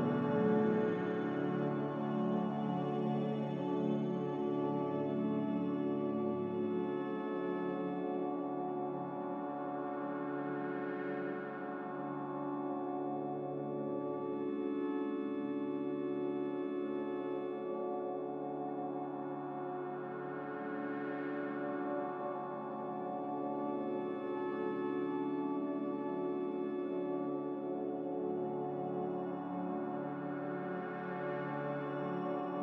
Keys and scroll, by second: 0.0 m, 4.0 Escape, 8.5 a, 9.4 a, 14.9 m, 25.3 a.